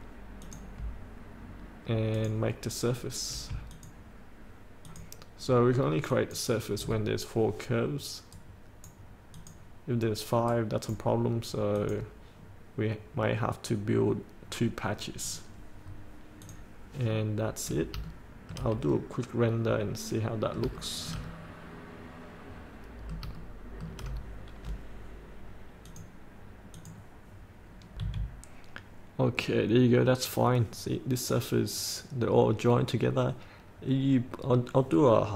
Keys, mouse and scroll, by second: 0.5 click, 3.8 ctrl+click, 5.0 ctrl+click, 6.2 ctrl+click, 8.5 right click, 9.5 click, 10.6 right click, 11.9 click, 12.5-12.8 scroll up 1, 15.4 click, 15.9-16.5 scroll up 1, 16.5 click, 17.2 middle click, 18.2 shift+middle click, 19.1-20.7 middle drag, 20.9 shift+middle click, 21.6-23.4 middle drag, 23.5 shift+middle click, 26.0 click, 28.1 F8.